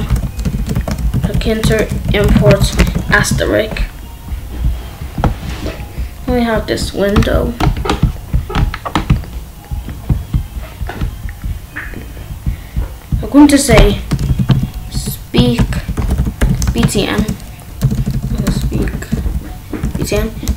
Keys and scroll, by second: 0.0-2.8 typing, 3.1 ctrl+s, 13.6 Return, 14.0-17.7 typing, 18.9-20.5 typing.